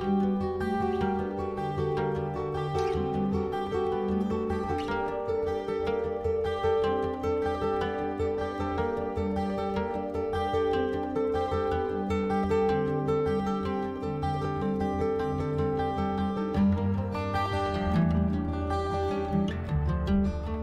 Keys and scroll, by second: 1.4 ctrl+v, 5.6 ctrl+c, 6.9 ctrl+v, 11.7 ctrl+c, 13.0 ctrl+v, 17.4 ctrl+c, 18.7 ctrl+v.